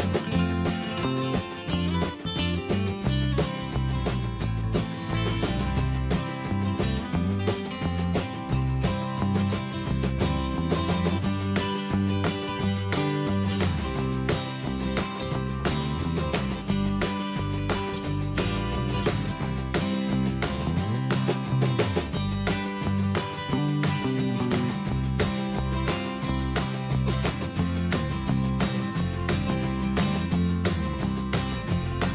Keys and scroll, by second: 8.3 ctrl+space, 25.4 ctrl+Return, 30.3 ctrl+z.